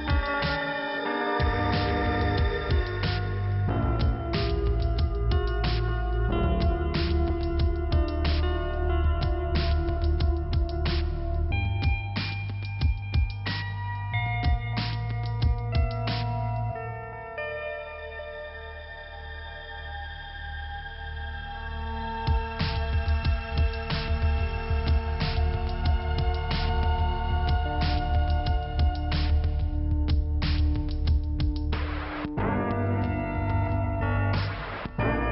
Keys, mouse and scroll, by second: 4.1 click, 5.5 click, 8.2 click, 9.9 click, 11.8 click, 14.4 middle click, 15.3 click, 18.8 click, 20.8 click, 21.5 click, 24.1 click, 25.6 click, 26.6 click, 31.3 scroll down 1, 33.2 click, 34.9 click.